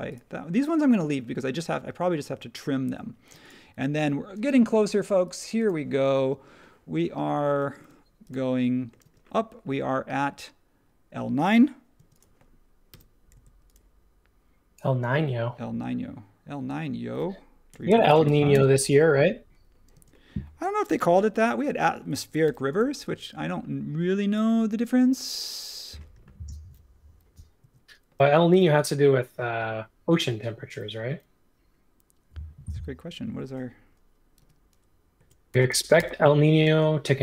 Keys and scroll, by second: 3.3 space, 7.7 space, 9.0 space, 11.9 space, 12.9 m, 17.4-18.7 typing, 19.9 typing, 21.0 super+1, 22.4 m, 24.7 space, 27.6 super+z, 28.5 m, 34.4-36.6 typing.